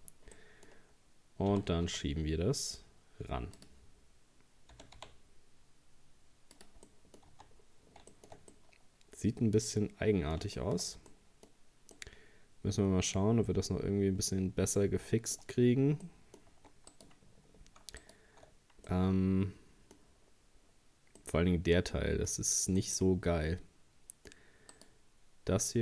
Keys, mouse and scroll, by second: 0.4 middle click, 0.7-1.0 scroll down 1, 1.5 g, 4.7 g, 6.9 middle click, 7.3 Tab, 7.6 scroll down 3, 8.1-11.0 shift+middle drag, 11.0 scroll up 1, 11.1 middle click, 11.6-12.0 scroll up 1, 12.0-15.0 middle drag, 15.6 scroll up 1, 16.1 middle click, 16.5 Tab, 16.9 right click, 18.0 alt+shift+right click, 18.9-20.3 middle drag, 20.3-21.2 scroll down 4, 21.2-22.4 middle drag, 22.4-22.8 scroll up 1, 22.8-24.8 middle drag, 24.8 right click.